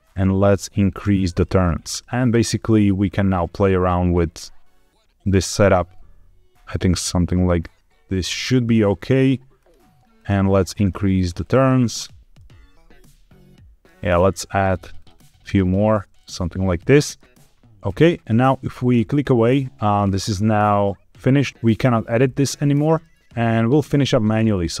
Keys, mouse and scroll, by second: 0.8 click, 1.2 click, 1.5 click, 1.6 click, 1.8 click, 2.0 click, 2.1 click, 3.0-8.2 shift+drag, 9.5 click, 10.1 click, 10.3 click, 10.6 click, 10.7 click, 11.3 click, 11.9-12.3 scroll down 1, 12.3-13.8 middle drag, 14.7 click, 14.9 click, 15.1 click, 15.5 click, 16.1-17.1 middle drag, 17.4 click, 18.7 click, 19.9-20.7 scroll up 4, 20.7 click, 21.5 shift+middle click, 21.5-22.2 scroll down 1, 22.2-22.6 scroll down 2, 22.9 shift+middle click, 23.2-24.0 scroll down 1, 24.4 click.